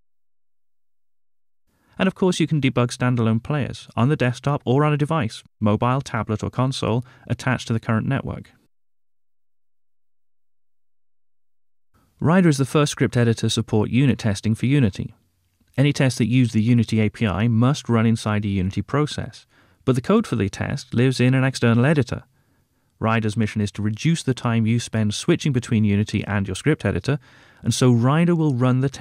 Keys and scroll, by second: 4.8 F7, 7.2 F8, 9.4 F7.